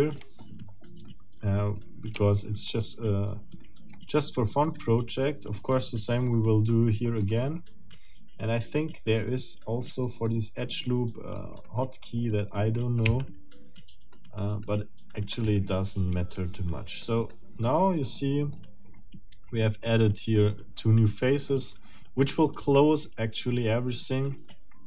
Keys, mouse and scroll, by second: 0.4 shift+middle click, 1.7-2.1 shift+scroll up 2, 2.3-3.6 shift+middle drag, 3.6 shift+click, 3.8 shift+middle click, 4.6 shift+right click, 7.2 click, 11.3 click, 11.9 middle click, 12.6-13.0 scroll down 2, 13.1 f, 14.1 middle click, 15.4 middle click, 16.1 a, 17.0 middle click, 17.3-17.8 scroll down 2, 18.1 middle click, 21.2 middle click, 21.7 click, 23.0-24.8 middle drag.